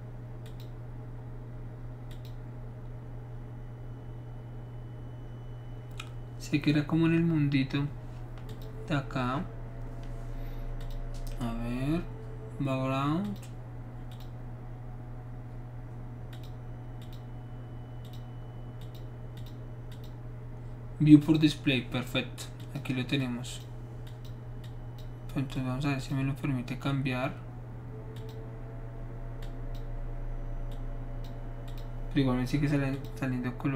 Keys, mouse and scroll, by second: 0.4 click, 2.1 click, 8.5 click, 10.8 click, 13.2 click, 14.1 click, 16.3 click, 17.0 click, 18.0 click, 18.8 click, 19.4 click, 19.9 click, 21.2 click, 22.6 click, 23.2 click, 24.1 click, 24.6 click, 25.5 click, 28.1 click, 29.4 click, 30.7 click, 31.7 click, 32.9 click.